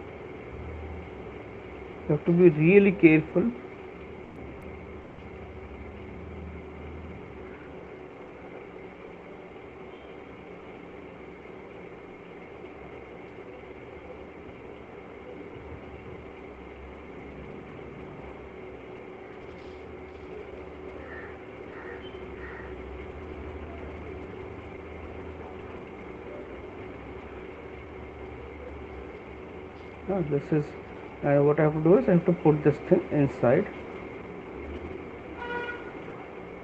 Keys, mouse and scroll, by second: 0.8 click, 2.2 click, 7.6 double click, 8.8 click, 10.8 click, 13.1 click, 13.9 click, 15.5 click, 16.7 click, 19.0 right click, 21.3 right click, 27.0 click, 28.7 right click, 31.3 right click, 35.5 right click, 36.5 click.